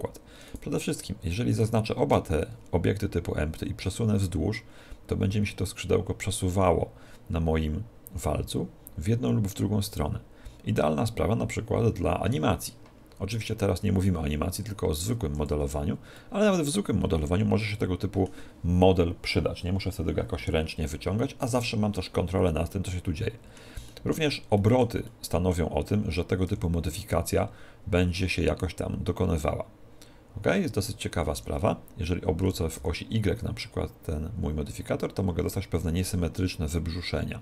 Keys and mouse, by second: 0.5-3.5 right drag, 4.0 click, 16.2-20.0 middle drag, 22.9-27.0 middle drag, 26.5 r, 27.1 r, 32.4 r.